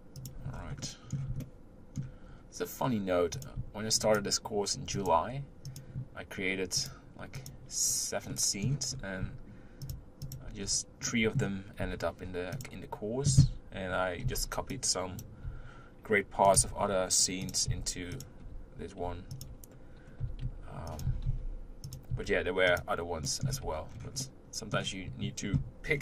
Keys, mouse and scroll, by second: 0.5-0.8 scroll down 4, 0.8-2.3 middle drag, 2.3 scroll up 2, 3.3 click, 4.9 shift+click, 5.6 shift+click, 6.8 shift+click, 7.3 shift+click, 7.9-8.3 scroll down 1, 8.3 middle click, 8.9-9.3 scroll up 3, 9.8 shift+click, 10.2 shift+click, 10.6-11.2 scroll down 2, 11.2 middle click, 11.8 u, 14.2 b, 16.6 g, 17.7 s, 18.4 g, 20.2 g, 21.0 s, 22.2 s, 23.3 middle click, 23.5 Tab, 23.9-24.2 scroll down 2, 24.2-25.8 middle drag, 25.8-26.0 scroll down 1.